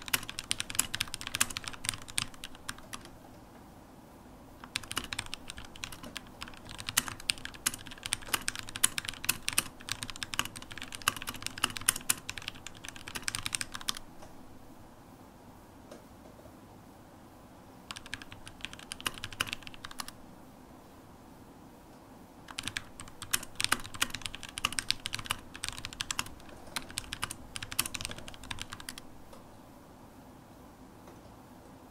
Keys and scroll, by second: 0.0-8.1 typing, 7.2 Escape, 13.6 super+q, 15.8 ctrl+shift+space, 15.8-17.4 typing, 20.5 super+h, 23.3 ctrl+shift+super+n, 26.1-29.3 typing, 30.7-31.8 typing.